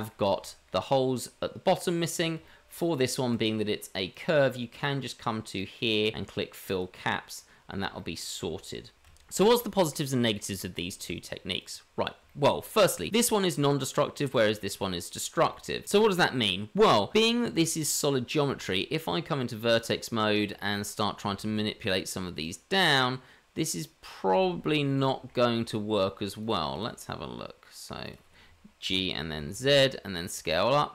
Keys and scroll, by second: 18.5 Tab, 21.3 shift+z, 24.3 shift+z, 28.9 g.